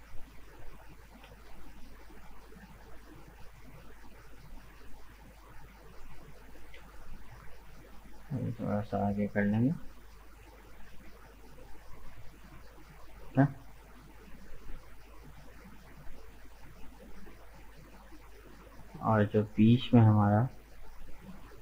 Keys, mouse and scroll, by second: 0.0 middle click, 0.5-1.4 scroll up 1, 1.4-3.0 shift+middle drag, 3.0 alt+right click, 3.3 middle click, 4.2-4.6 scroll down 1, 4.6-5.8 middle drag, 5.8 alt+right click, 6.5 g, 10.2-11.3 middle drag, 11.3-11.8 scroll down 2, 11.8 Tab, 11.9 right click, 12.2-15.5 middle drag, 15.5 Tab, 15.9-17.7 middle drag, 17.7 right click, 18.5 shift+right click, 19.1 shift+right click, 19.5 shift+right click, 20.0 shift+right click, 20.7 shift+right click, 21.1-21.6 middle drag.